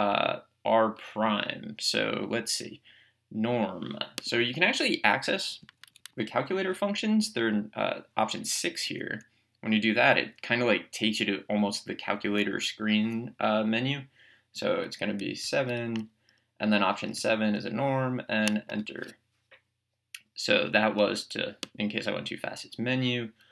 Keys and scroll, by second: 4.3 Menu, 5.6 Down, 8.9 Right, 15.5 7, 18.7 Return, 21.7 Menu.